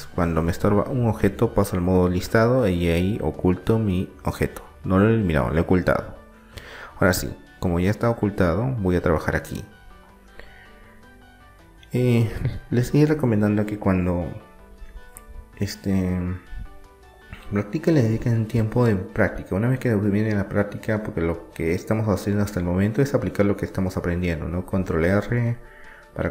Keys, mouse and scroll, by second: 0.0-1.9 drag, 1.9-5.0 middle drag, 4.3 KP_1, 6.2-8.2 middle drag, 7.6 KP_3, 8.6-10.2 drag, 10.2-12.9 middle drag, 12.9 e, 14.7-16.4 drag, 18.6 ctrl+r, 24.9 ctrl+r.